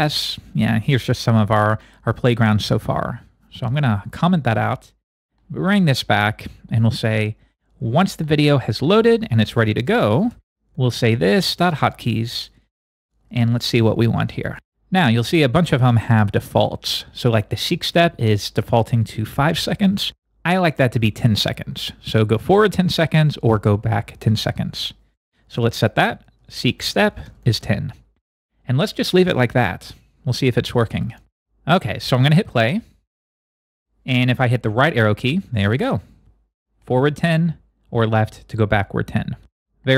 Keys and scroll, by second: 34.6 Right, 35.7 Right, 38.0 Left.